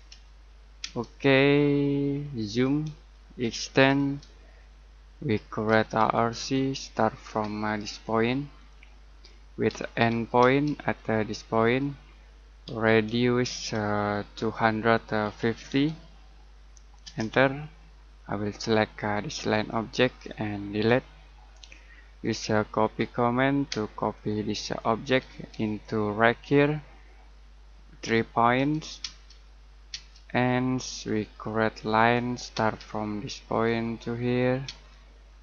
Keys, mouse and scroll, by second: 1.5 middle click, 2.4 z, 2.9 space, 3.4 e, 3.9 space, 4.5-5.0 scroll down 1, 5.0 middle click, 5.4-7.1 typing, 8.5 click, 9.6 e, 10.4 space, 11.6 click, 12.6-15.6 typing, 17.0 Return, 18.9 click, 20.7 Delete, 21.5 middle click, 22.2-23.7 typing, 24.1 click, 25.2 space, 25.6 click, 28.0 3, 29.0 space, 30.6-31.4 scroll up 1, 31.4 middle click, 31.8 l, 32.5 space, 33.5 click, 34.6 space, 34.8-35.2 scroll down 1, 35.2 middle click.